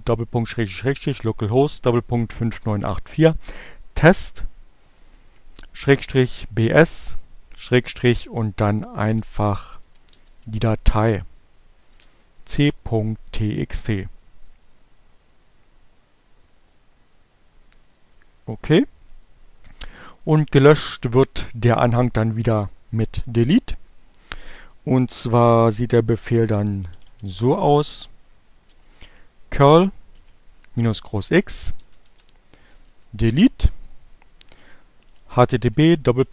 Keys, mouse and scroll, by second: 7.0-8.2 typing, 9.8 t, 10.3 Return, 24.9-26.0 typing, 27.9-28.9 typing, 30.2-31.7 typing, 32.9-33.7 typing, 34.9-36.3 typing.